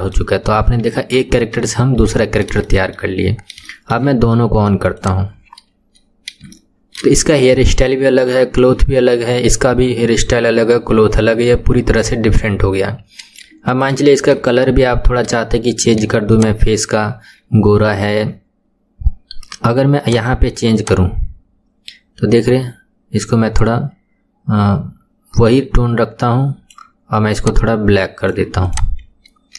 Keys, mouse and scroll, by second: 0.6 KP_1, 1.3-1.6 scroll down 3, 1.8-2.2 shift+middle drag, 2.2-2.7 scroll down 3, 2.7-3.4 shift+middle drag, 3.4-3.7 scroll up 2, 3.7-5.2 shift+middle drag, 5.2 click, 6.2-6.6 scroll up 2, 6.6-9.7 shift+middle drag, 12.9-13.4 scroll up 2, 13.4-14.4 middle drag, 14.4 KP_1, 14.9-15.5 scroll down 1, 15.5-16.4 shift+middle drag, 16.4 click, 17.6-19.3 scroll up 13, 19.3-19.7 scroll down 1, 20.1 click, 28.7 click, 29.1 scroll up 2.